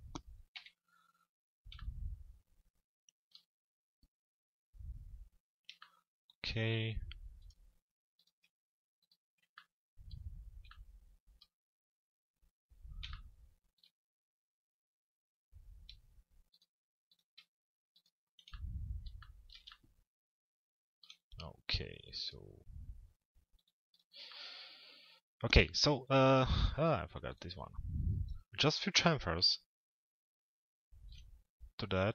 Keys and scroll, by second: 0.2 z.